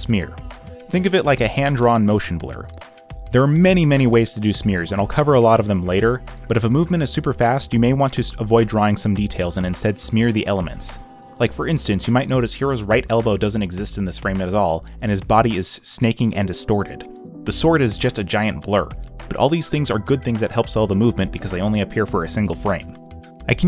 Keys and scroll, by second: 0.0-0.5 typing, 1.7-3.7 typing, 5.5 ., 6.4 space, 6.9 z, 7.8 ctrl+z, 8.4 space, 10.2 ctrl+z, 10.8 space, 11.5 z, 12.4 space, 14.3 ctrl+z, 18.2 space, 18.4 ., 20.4 ctrl+z, 22.5 space.